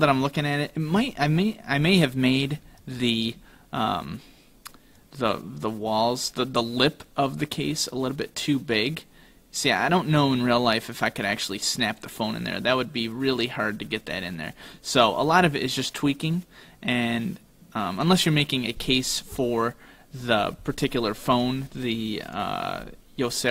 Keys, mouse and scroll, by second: 0.1 shift+middle click, 1.3-1.9 scroll up 2, 1.9 middle click, 2.9 right click, 4.2-4.5 scroll down 2, 5.0 click.